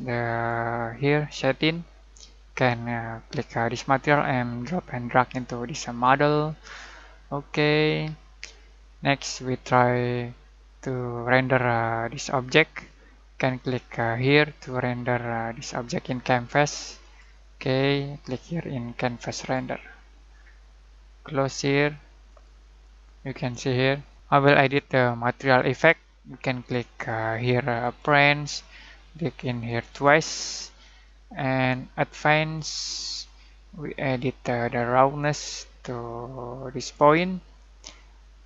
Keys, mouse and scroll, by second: 3.5-6.3 drag, 6.9-9.1 middle drag, 19.2 click, 19.3 click, 22.2 click, 27.8 click, 34.7-36.9 drag.